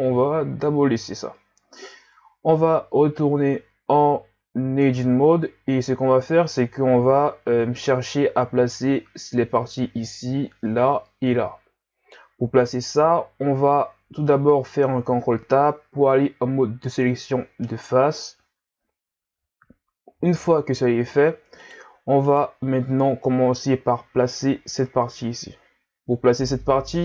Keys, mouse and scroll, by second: 4.7 Tab, 12.6-13.5 scroll down 1, 14.8 ctrl+Tab, 19.6-20.4 scroll down 2, 20.4-21.5 scroll up 1, 21.6 right click, 22.3 right click.